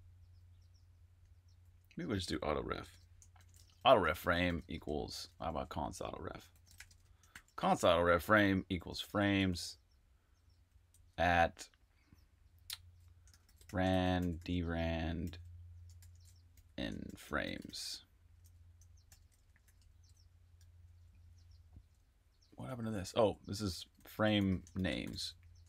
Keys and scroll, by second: 0.3-7.3 typing, 8.6-10.9 typing, 13.0-16.5 typing, 18.7-25.6 typing.